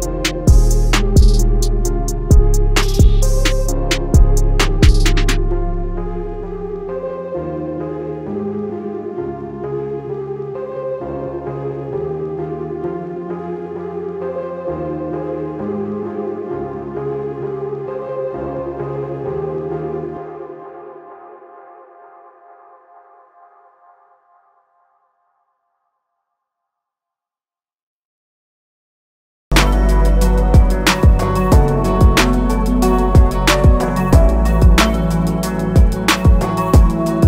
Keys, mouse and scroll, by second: 4.4 a, 4.7 click, 9.3 i, 10.4 click, 11.1 a, 11.3 click, 13.7 i, 14.6 click, 16.2 a, 17.5 click, 24.9 click, 26.5 a, 26.7 click, 29.2 click, 31.0 i, 31.7 click.